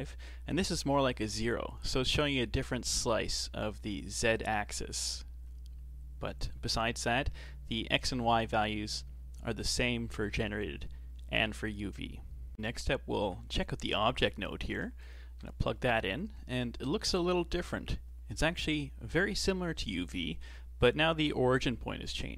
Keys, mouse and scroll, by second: 1.4-4.3 middle drag, 4.3-7.2 drag, 7.2-10.3 middle drag, 13.4-15.1 shift+middle drag, 15.1 ctrl+shift+click.